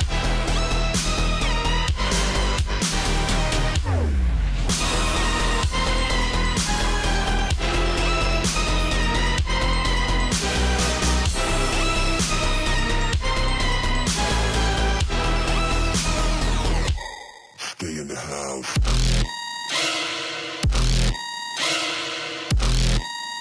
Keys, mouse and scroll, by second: 0.2 click, 1.7 alt+scroll up 1, 1.8 click, 4.0 Right, 4.4 click, 5.1 alt+scroll down 1, 5.2 click, 8.0 click, 11.8 click, 12.4 alt+scroll down 1, 13.0 ctrl+d, 16.1 click, 22.7 ctrl+g, 23.1 click.